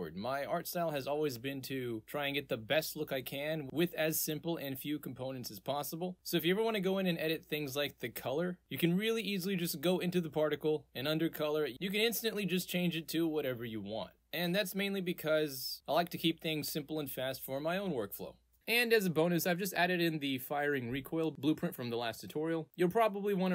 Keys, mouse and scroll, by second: 3.0 click, 3.8 click, 4.5 click, 6.8 click, 7.6 click, 8.7 click, 9.9 click, 10.5-11.7 drag, 12.2 click, 12.6 click, 12.8 click, 13.3 click, 13.8 click, 14.5-17.1 drag, 18.9 click, 19.9 click, 20.3-21.2 drag, 21.4 click, 21.9 click, 23.3-23.5 right drag.